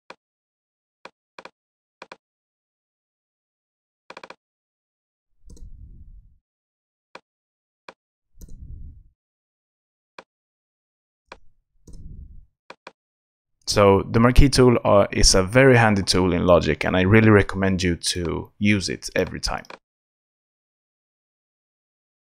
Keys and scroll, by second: 5.5 super+BackSpace, 6.5 super+BackSpace, 8.4 super+BackSpace, 9.3 super+BackSpace, 11.8 super+BackSpace.